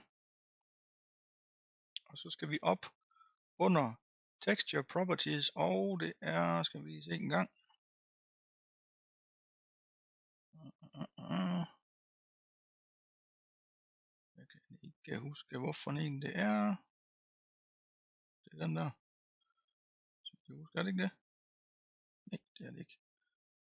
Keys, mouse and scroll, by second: 18.3 click.